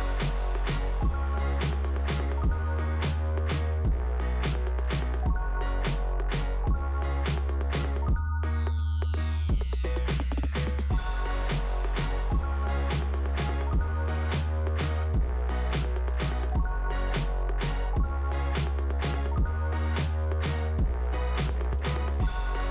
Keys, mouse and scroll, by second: 0.5 click, 5.0 click, 8.3 click, 12.8 click, 13.9 click, 17.0 click, 17.1 click, 18.3 click.